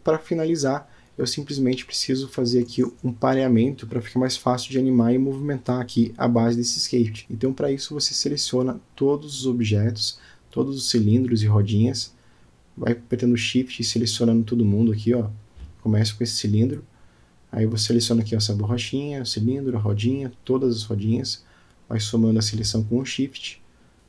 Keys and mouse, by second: 0.0 middle click, 1.5-1.8 drag, 1.9 click, 2.5 middle click, 2.9-3.7 middle drag, 5.5 middle click, 6.2 middle click, 7.2 click, 9.3 click, 11.0 middle click, 12.6 middle click, 14.5 shift+click, 16.5 shift+click, 17.5-18.8 middle drag, 19.8 shift+click, 20.8 shift+click, 23.8 shift+click.